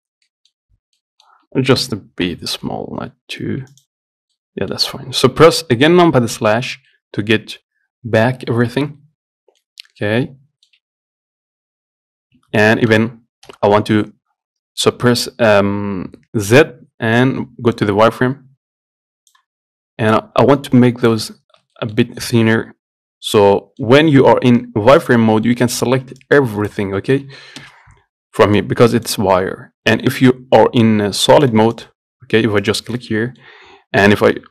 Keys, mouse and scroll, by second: 0.0 shift+middle click, 0.3 scroll up 1, 0.5 middle click, 1.0 Tab, 1.2 middle click, 2.1 g, 4.3 Tab, 4.6-5.9 middle drag, 5.9 KP_Divide, 7.1-13.7 middle drag, 13.7 KP_1, 14.4 scroll up 2, 15.2 z, 20.4-21.6 drag, 21.6 scroll up 2, 22.0-23.3 shift+middle drag, 23.3 scroll down 1, 23.6 middle click, 24.1-24.6 scroll down 1, 24.6 z, 25.7 middle click, 26.5 click, 27.2 middle click, 27.9 KP_1, 28.4-28.8 scroll up 4, 28.8-30.2 drag, 30.2 z, 32.0 click, 32.9 click, 33.3-34.3 middle drag, 34.3 KP_1.